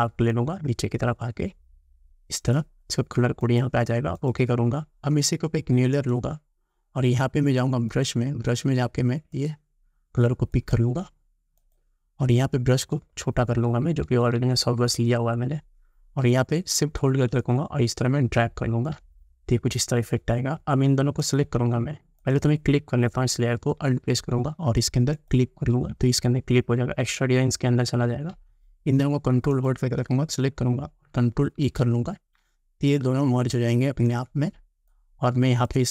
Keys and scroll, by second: 13.0 [, 31.7 ctrl+e.